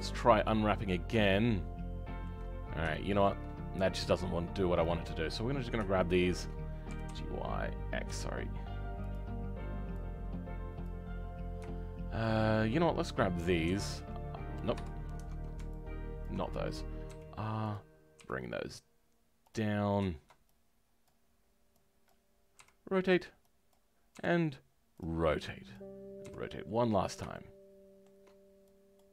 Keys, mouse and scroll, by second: 6.9 g, 13.6 r, 16.2 ctrl+click, 17.0 r, 22.0 click, 22.5 r.